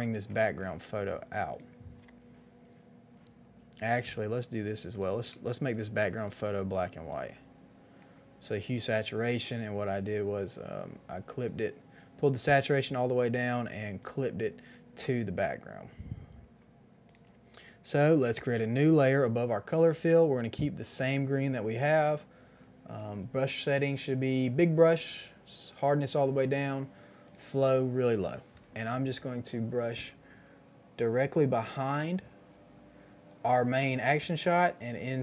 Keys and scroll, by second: 6.2 ctrl+alt+g.